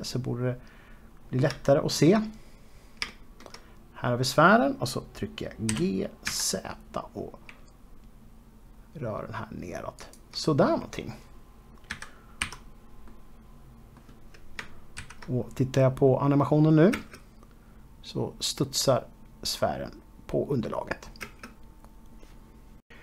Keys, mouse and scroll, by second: 1.4-1.9 scroll up 2, 2.4 shift+middle click, 3.0-3.8 scroll up 2, 3.8 shift+middle click, 6.4 g, 10.7 shift+click, 11.4-12.0 scroll down 2, 12.6 z, 13.8 middle click, 17.6 space, 19.5-21.9 scroll up 4, 22.0 space.